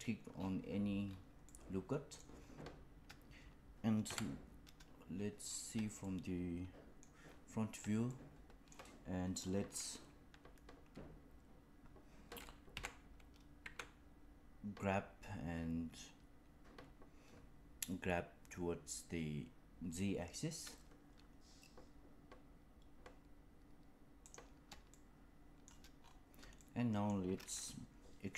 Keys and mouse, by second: 1.4 middle click, 4.0 KP_1, 5.9 shift+middle click, 8.0 shift+middle click, 12.6 g, 24.9 shift+middle click, 26.5 shift+middle click.